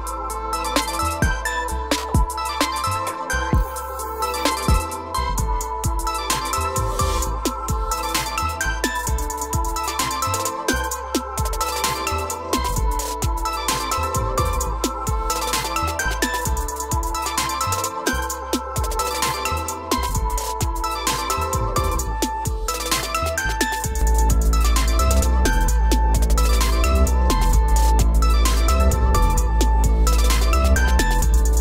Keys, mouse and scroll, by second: 1.8 click, 2.8 d, 5.2 click, 5.6 d, 6.3-6.7 scroll, 7.4 o, 8.0 click, 10.4 click, 11.6 scroll, 12.9 click, 14.1 click, 15.5-16.7 drag, 17.3 o, 18.9 click, 19.2 scroll, 19.7 scroll up 7, 20.3 click, 20.8 scroll down 5, 21.5 click, 21.8 scroll, 22.6 click, 23.2 click, 23.9-24.8 scroll up 7, 24.8-25.3 scroll down 6, 25.6 click, 25.8 click, 26.1 click, 26.1 scroll, 26.8 click, 27.0 click, 27.6-28.0 shift+click, 29.8 click, 31.2 click.